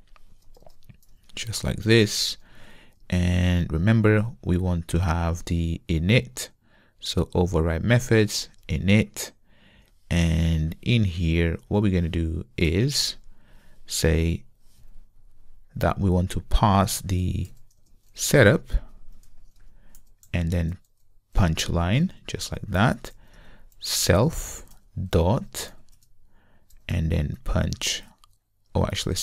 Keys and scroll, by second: 4.0 super+n, 7.3 ctrl+o, 8.3 Down, 21.4 super+v, 24.4 super+v.